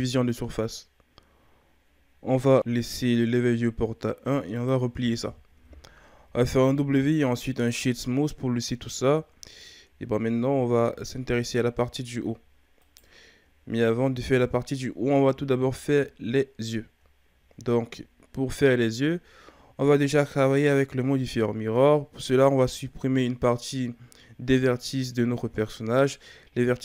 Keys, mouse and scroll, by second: 5.3-6.2 shift+scroll up 2, 6.2 w, 9.6-10.4 shift+scroll up 2, 10.4 Tab, 11.1-11.6 shift+scroll up 4, 12.8 right click, 13.6-14.4 shift+scroll up 2, 14.4-16.6 ctrl+scroll down 7, 16.6-17.0 shift+scroll up 3, 17.8-19.2 shift+scroll down 1, 19.2-22.3 ctrl+scroll down 3.